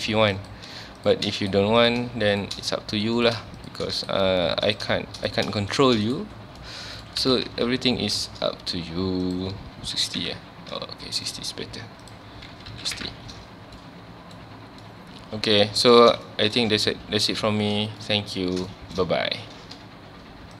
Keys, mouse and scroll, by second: 0.3 click, 1.0 shift+click, 1.8 click, 2.3 shift+click, 3.2 click, 3.6 shift+click, 4.7 drag, 5.2 click, 5.7 shift+click, 6.5 scroll down 1, 6.6 middle click, 7.2 alt+a, 7.5 Tab, 8.5-9.2 scroll down 1, 9.2-10.3 drag, 10.3 KP_Enter, 11.3 click, 12.0-13.0 drag, 13.0 KP_Enter, 13.6 scroll down 1, 13.8-15.9 middle drag, 15.9 scroll up 1, 16.3 shift+middle drag, 16.6-16.9 scroll up 1, 16.9 ctrl+s, 17.6-18.0 scroll down 1, 18.0-18.5 middle drag, 18.5 scroll down 1, 18.7-20.6 shift+middle drag.